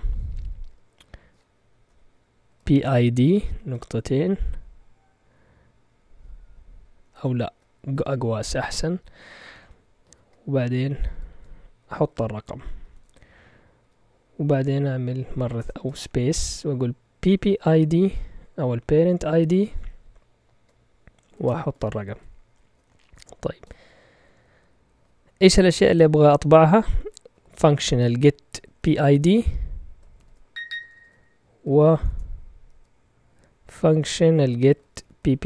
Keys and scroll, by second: 0.7 space, 2.2-3.5 typing, 7.1 BackSpace, 7.8 (, 11.1 %, 11.7 d, 12.9 shift+Tab, 13.7 ,, 15.5 BackSpace, 15.7 space, 17.1-19.4 typing, 21.3-23.6 typing, 27.2-32.7 typing, 34.4-35.4 typing.